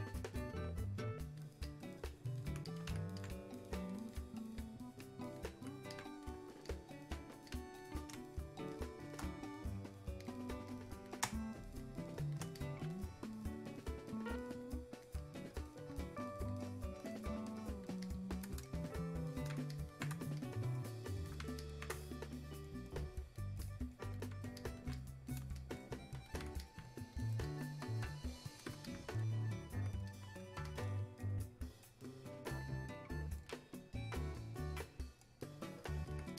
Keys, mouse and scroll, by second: 8.2 space, 8.7 click, 8.8 space, 10.2 click, 11.2 space, 11.8 click, 12.1 space, 12.6-36.3 drag.